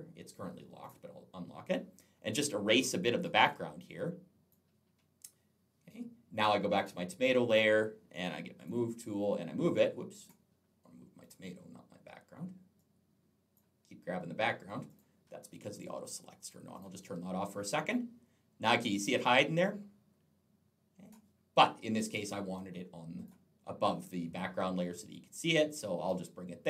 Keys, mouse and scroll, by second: 0.6 click, 3.2 click, 3.8 click, 6.6 click, 8.4 click, 9.1 click, 11.0 click, 12.6 click, 14.7 click, 14.8 click, 16.6 click, 17.3 click, 21.8 click, 24.8 click.